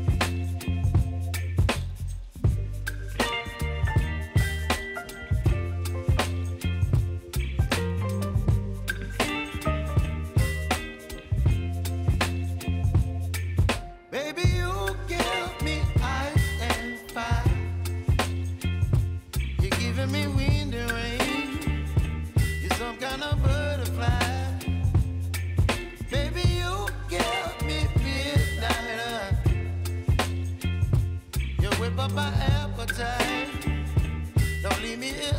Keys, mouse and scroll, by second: 0.8 click, 10.4-19.3 drag, 22.0 ctrl+alt+Home, 23.3 click, 27.1 ctrl+d, 28.5-31.2 drag, 32.0 v, 33.2-35.3 drag.